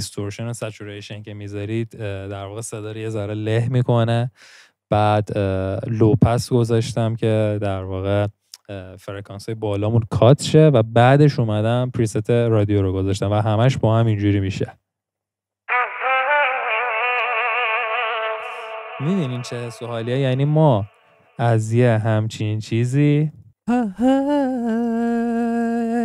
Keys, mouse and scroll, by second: 15.6 scroll down 2, 16.1-18.4 scroll up 4.